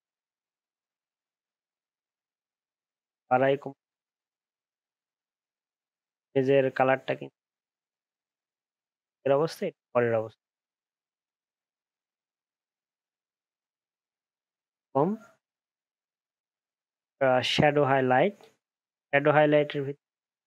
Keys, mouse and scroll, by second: 9.0 ctrl+z, 9.7 ctrl+shift+z, 10.6 ctrl+shift+z, 11.2 ctrl+shift+z, 12.4 ctrl+z.